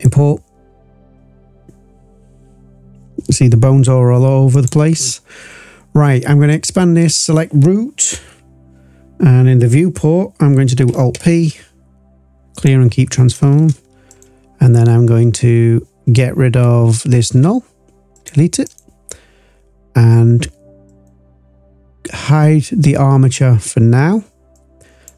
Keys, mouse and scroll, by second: 4.5 click, 6.4 click, 11.1 alt+p, 14.0 click, 17.2 Delete, 18.1 click, 18.6-20.3 drag, 20.8 click, 24.5 click.